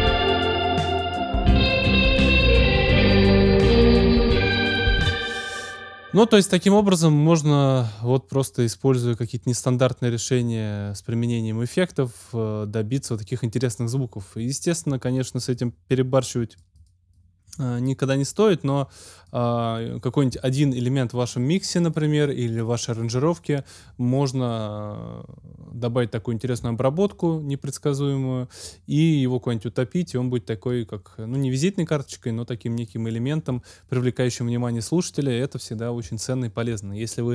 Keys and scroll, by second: 4.9 space.